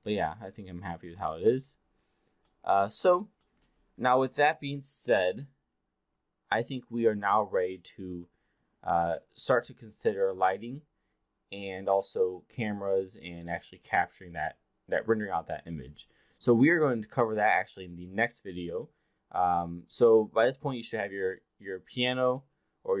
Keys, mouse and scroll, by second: 0.5 click, 1.3-1.7 alt+drag, 2.4-2.7 alt+middle drag, 3.4 alt+middle drag, 6.0-8.0 alt+drag.